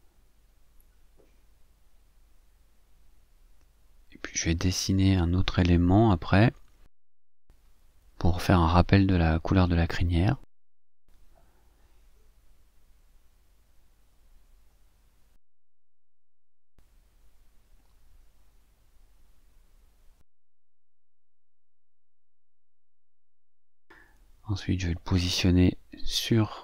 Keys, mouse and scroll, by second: 0.7-2.2 drag, 3.1 ctrl+z, 4.2 click, 4.9 click, 5.7 click, 9.6 click, 13.4 click, 15.7 click, 16.3 click, 17.7 click, 18.3 click, 20.5 click, 24.7 click, 26.5 click.